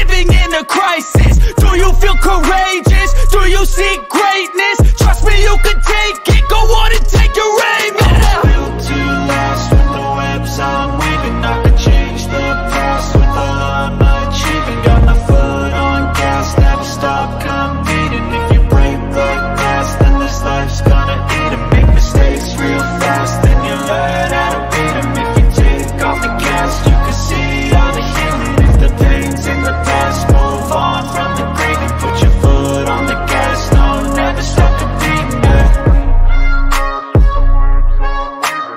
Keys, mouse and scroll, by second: 2.1 click, 3.8-6.0 drag, 7.3-8.9 drag, 10.2-11.3 drag, 11.7 click, 12.9 click, 13.4-14.0 drag, 14.5 ctrl+click, 15.8 click, 18.1 click, 19.4 click, 29.7 click, 32.0 click, 33.1 click, 33.7 click, 34.9 click, 35.6 click, 36.4 click, 38.1 click.